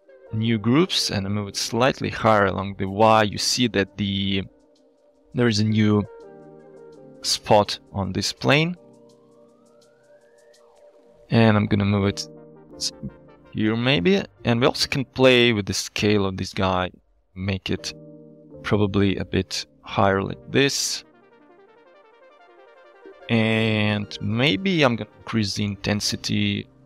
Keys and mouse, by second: 0.1-4.7 shift+drag, 8.8-13.9 shift+drag, 15.2 middle click, 15.3 shift+click, 15.9 shift+click, 16.9-17.9 shift+drag, 18.2-23.2 shift+drag, 24.5 middle click, 25.2 middle click.